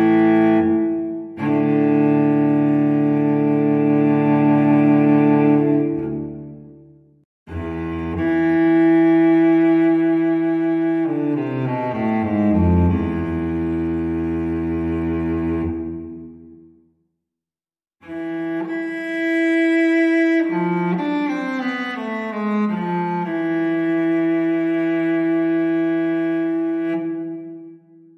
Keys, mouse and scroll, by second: 2.1 click, 4.1 click, 5.4 click, 6.5 click, 7.2 click, 9.9 ctrl+click, 12.6 ctrl+click, 13.6 ctrl+click, 14.3 ctrl+click, 14.9 ctrl+click, 15.9 ctrl+click, 17.4 ctrl+click, 18.2 click, 20.8 click, 22.7 click, 24.0 click, 25.3 click, 26.6 click, 27.5 click.